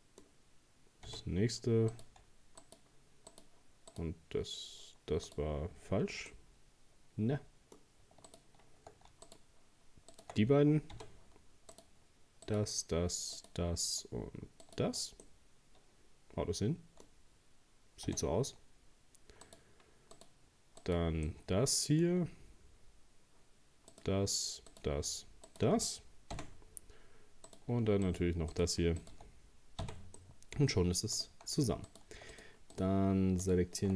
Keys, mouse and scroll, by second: 1.1 f, 1.9 right click, 2.6 shift+right click, 3.3 shift+right click, 3.9 shift+right click, 5.3 shift+right click, 6.3-8.3 middle drag, 8.3 shift+right click, 9.3 shift+right click, 10.1 shift+right click, 10.9 f, 11.7 right click, 12.5 shift+right click, 13.4 shift+right click, 14.6 shift+right click, 15.2-18.1 middle drag, 18.1 f, 19.4 right click, 20.2 right click, 20.8 right click, 21.3-23.9 middle drag, 23.9 shift+right click, 24.7 shift+right click, 25.5 shift+right click, 26.4 f, 27.5 right click, 28.1 shift+right click, 28.5 shift+right click, 29.0 shift+right click, 29.8 f, 30.2 middle click, 31.2 right click, 31.9 right click, 32.3 right click, 32.7 right click, 33.4 alt+shift+right click.